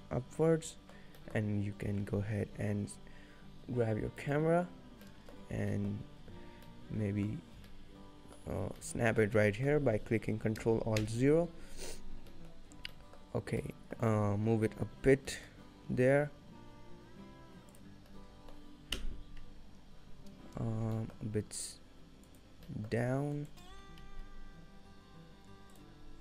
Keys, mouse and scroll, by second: 1.3 middle click, 1.9 shift+a, 4.3 click, 4.9 scroll down 2, 5.1 middle click, 5.5-6.5 scroll up 7, 5.8 middle click, 6.5-7.2 scroll down 2, 6.7 middle click, 7.4-7.8 scroll up 2, 7.8 shift+middle click, 9.4 middle click, 11.1 ctrl+alt+KP_0, 12.3 scroll up 1, 12.4 middle click, 12.6-13.6 scroll down 5, 13.0 middle click, 14.1 middle click, 14.5 g, 18.2 middle click, 19.0 KP_0, 20.9 g, 22.7 g.